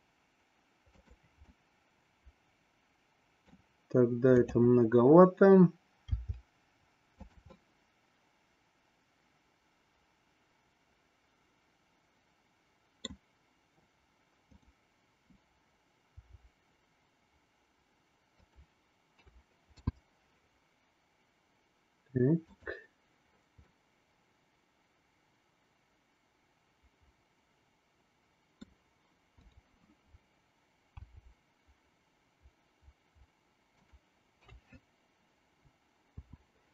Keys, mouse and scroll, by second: 1.8-3.7 middle drag, 6.0 r, 7.7-13.1 middle drag, 14.4-15.9 drag, 16.1 r, 19.1 a, 19.7 i, 22.5 click, 23.6-28.6 middle drag, 29.4-30.5 drag, 31.0 r, 34.4 a, 36.1 i.